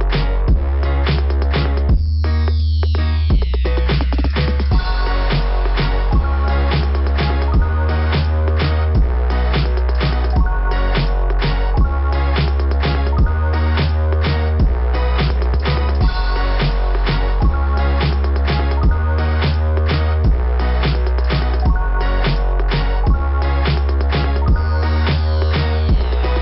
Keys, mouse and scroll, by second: 2.5 scroll up 2, 4.8 scroll down 2, 6.8 click, 6.8 click, 9.1 scroll down 2, 11.5 scroll down 2, 12.1 click, 12.2 scroll down 1, 12.2 click, 12.4 click, 12.5 click, 12.7 click, 12.8 click, 12.8 click, 13.8 scroll up 2, 16.8 click, 17.0 click, 20.3 click, 20.6 click, 21.0 click, 21.2 click, 21.4 click, 21.5 click, 21.6 click, 25.3 click, 25.6 click, 25.8 click, 25.9 click, 26.0 click, 26.1 click, 26.3 click.